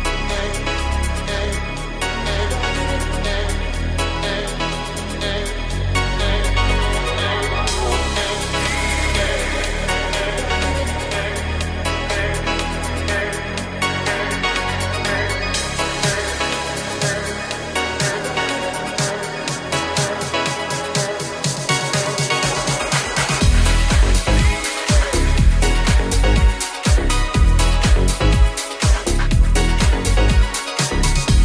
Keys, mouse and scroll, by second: 12.2 e, 13.3 g, 15.0 s, 17.7 g, 18.7 s, 20.2 g, 31.1 alt+z.